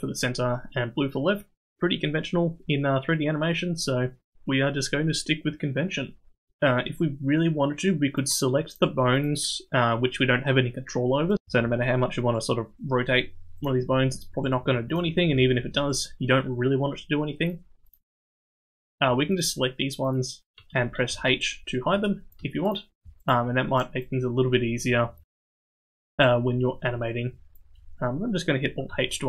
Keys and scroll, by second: 12.3 r, 14.6 r, 16.0 r, 21.1 h, 26.0 h, 28.9 alt+h.